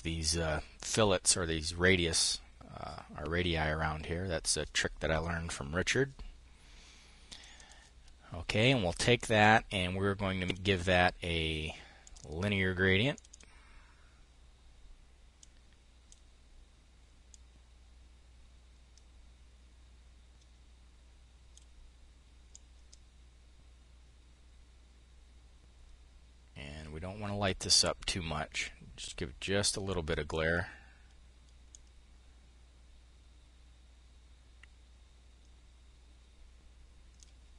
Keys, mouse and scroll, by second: 6.7 click, 8.0 click, 9.9-11.2 drag, 11.5-14.1 drag, 14.8-16.6 drag, 16.7-21.8 drag, 21.9-30.9 drag, 31.1-36.9 drag.